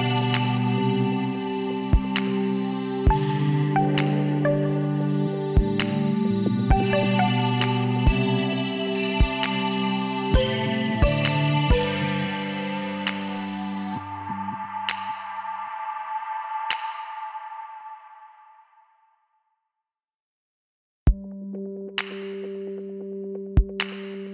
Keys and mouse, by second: 1.1-2.9 drag, 3.2 z, 3.7 middle click, 6.9 e, 9.9 click, 10.4 middle click, 11.2 s, 16.4 middle click, 17.7 shift+s, 19.8 shift+a, 21.9 s, 23.7 s.